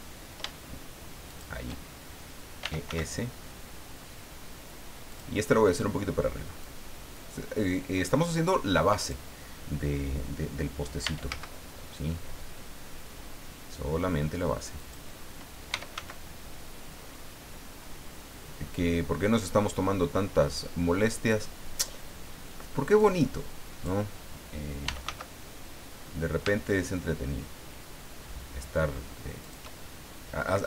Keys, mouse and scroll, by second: 1.3 shift+click, 2.6 e, 2.9 s, 5.1 click, 6.6-9.3 drag, 11.0 e, 11.3 z, 14.8 click, 15.5-16.4 typing, 21.7 click, 23.0 click, 24.6-25.5 typing, 29.4 shift+click.